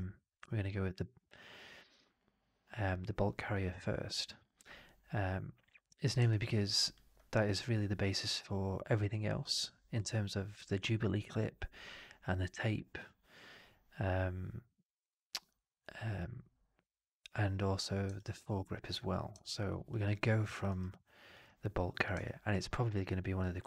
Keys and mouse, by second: 6.2 alt+right click, 6.4 alt+click, 18.0 alt+drag, 19.3-19.8 alt+drag, 20.0 alt+click, 20.3 alt+middle drag, 20.5 alt+right drag, 20.8-21.2 alt+drag, 22.1-23.6 alt+drag.